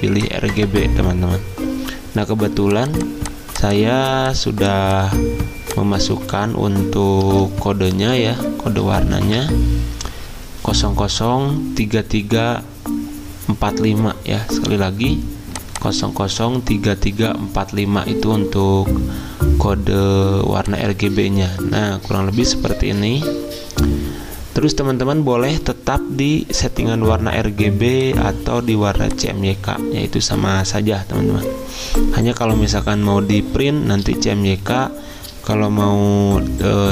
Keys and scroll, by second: 7.2-8.2 typing, 9.2 ctrl+v.